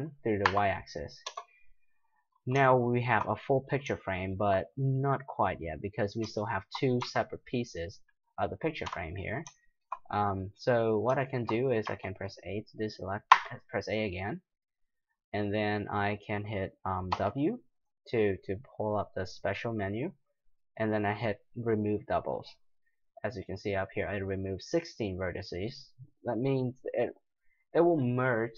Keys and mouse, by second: 2.3-4.1 middle drag, 7.0 g, 11.8 a, 13.3 a, 17.1 w.